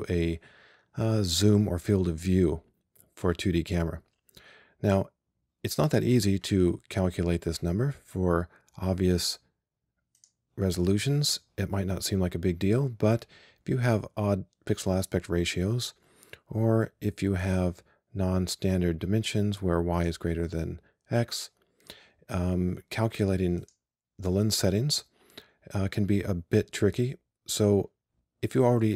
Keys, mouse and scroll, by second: 10.2-19.4 drag, 23.7-28.2 drag.